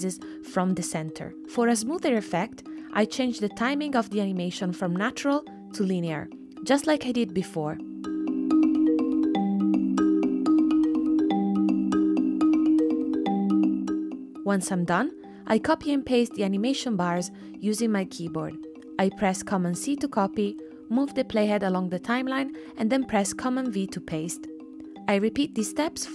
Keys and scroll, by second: 16.1 super+c, 18.0 super+v, 21.2 super+v, 23.4 super+c, 25.6 super+v.